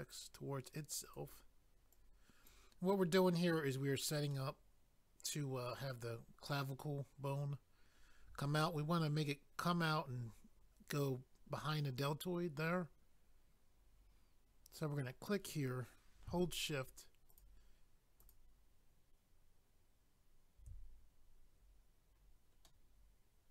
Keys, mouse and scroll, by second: 1.1 click, 1.2 click, 1.9 click, 4.3 middle click, 7.3 scroll down 1, 8.0 scroll down 1, 12.9-14.1 scroll up 1, 15.3 click, 15.4 click, 17.3 shift+click, 17.4 shift+click, 18.2 shift+click, 18.3 shift+click, 22.6 middle click.